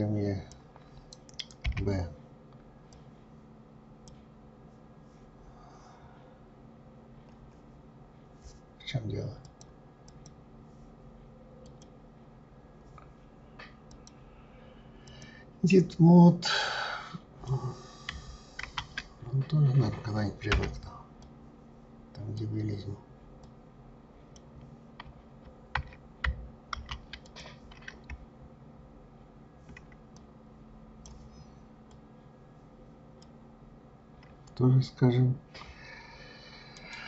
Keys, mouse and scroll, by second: 1.6 b, 9.4-11.8 drag, 13.9-16.7 drag, 18.6 ctrl+z, 20.5 b, 22.3 click, 23.4 click, 26.7 ctrl+z, 27.3 click, 30.1-32.2 drag, 36.8-37.0 right drag.